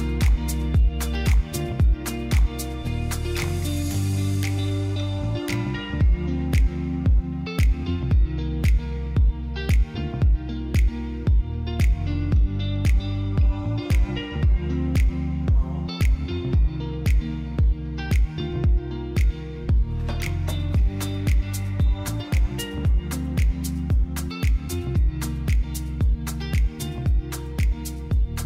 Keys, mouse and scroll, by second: 16.9-18.5 middle drag.